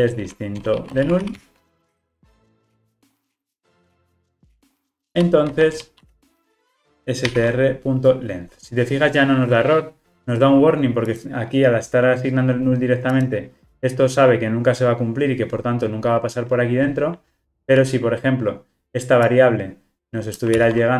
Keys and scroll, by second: 2.7 Return, 20.6 super+c.